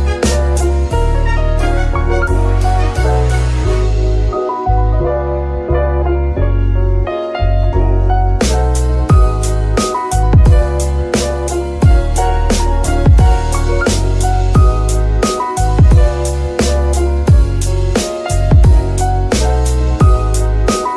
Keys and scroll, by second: 3.0 z, 12.7 alt+g, 13.8 g, 15.6 Escape, 16.2 g, 17.1 Escape, 20.5 g.